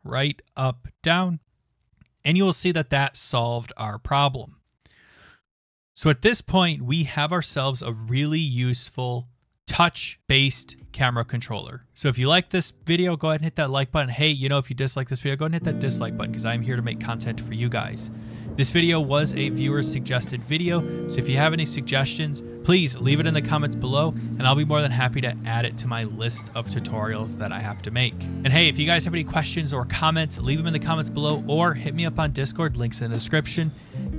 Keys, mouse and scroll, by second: 7.9-9.6 scroll, 9.6 click.